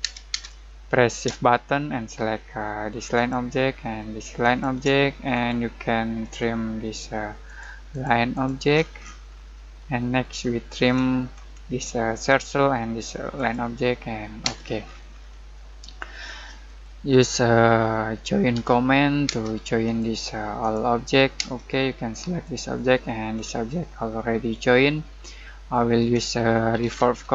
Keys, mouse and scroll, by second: 3.1 shift+click, 5.2-5.7 scroll up 1, 6.2 click, 8.7-9.0 scroll down 1, 9.5 middle click, 9.7 scroll down 1, 9.9 middle click, 10.3-10.8 scroll up 1, 12.2 click, 14.4 space, 15.5 middle click, 16.0 scroll down 1, 16.2-18.5 middle drag, 18.5 j, 19.2 space, 19.8 click, 21.3 space, 22.4 click, 23.3-24.0 scroll up 1, 24.4 middle click, 25.1 scroll down 1, 25.4 middle click, 26.0 Escape, 26.5-27.3 typing.